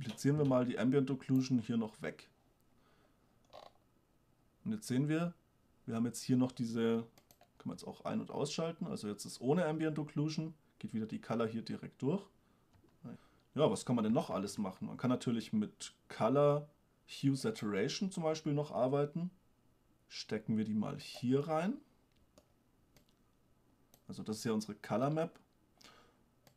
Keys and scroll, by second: 8.0 m, 13.0 m, 14.5 shift+a.